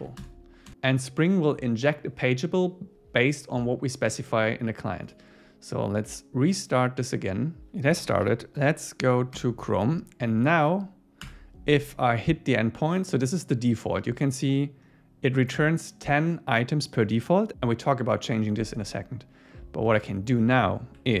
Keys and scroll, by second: 5.1 super+s, 9.3 Return, 11.3 Return.